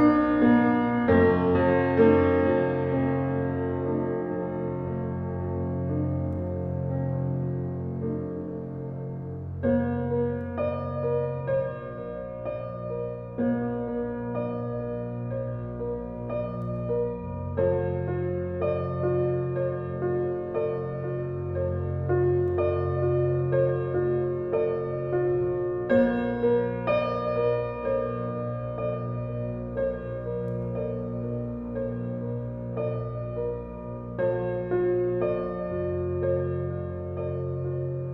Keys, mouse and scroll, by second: 0.4-0.8 scroll up 1, 2.7 scroll down 1, 17.7 scroll up 1, 18.3 scroll down 1, 22.6 click, 23.2 scroll up 1, 25.6 typing, 31.3 click, 31.7-32.0 scroll down 1, 33.0 scroll up 1, 37.8 click.